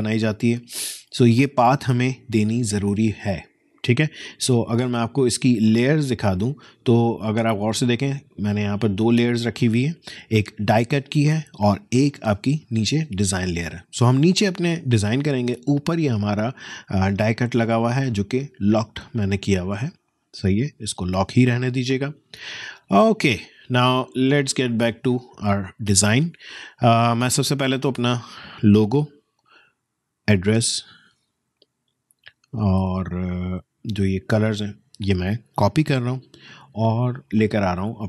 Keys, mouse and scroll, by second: 5.4 alt+click, 12.2 alt+click, 15.8 alt+click, 18.2 alt+click, 24.7 alt+click, 27.6 alt+click, 30.2 alt+click, 35.9 ctrl+alt+c, 37.3 click.